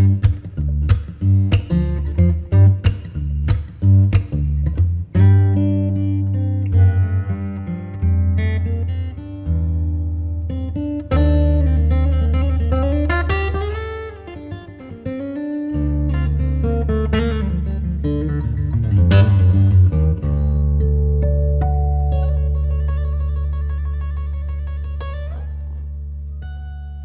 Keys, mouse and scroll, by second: 0.6 r, 4.7 alt+r, 5.4-6.2 scroll up 1, 6.2-9.3 drag, 9.3 r, 16.7 alt+r, 19.3 click, 20.6 Tab, 21.6 r, 23.4 Tab, 23.9-27.0 middle drag.